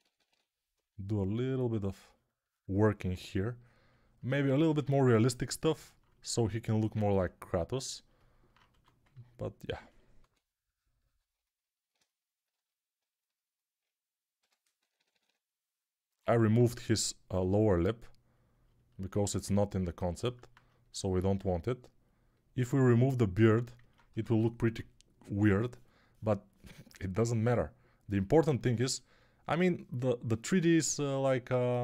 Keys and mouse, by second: 0.0-0.1 typing, 8.6 1, 10.1 2, 14.3-15.1 typing, 16.3 alt+q, 24.0 1, 24.6 [, 25.1 [, 25.2 [.